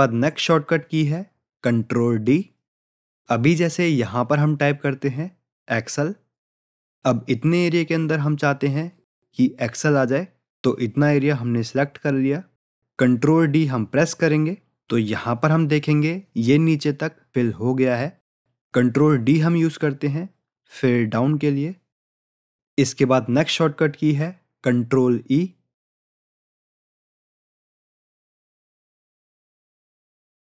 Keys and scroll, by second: 13.1 ctrl+d.